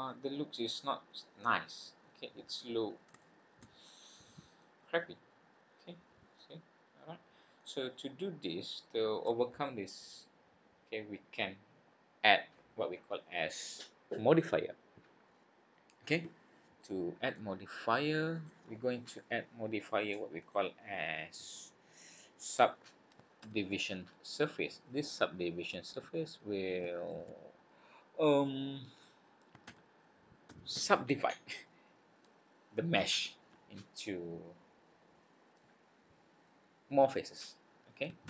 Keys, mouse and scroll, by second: 1.6-2.5 scroll down 5, 2.5-2.9 scroll up 5, 3.2 shift+middle click, 3.8 middle click, 4.7-5.1 scroll down 6, 5.5-5.9 scroll up 4, 6.4 middle click, 8.0 scroll down 2, 8.5-8.8 scroll up 2, 18.3 click, 20.4 click.